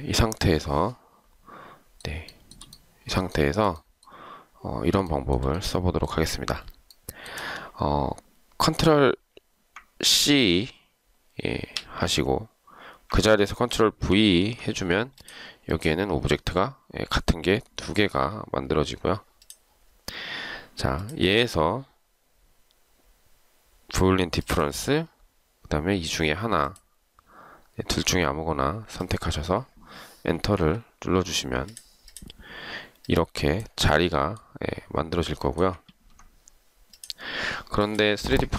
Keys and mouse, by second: 2.5 shift+right click, 3.5 shift+right click, 5.2 shift+right click, 7.1 shift+right click, 11.9 ctrl+c, 14.3 ctrl+v, 30.6 Return, 36.1 ctrl+z.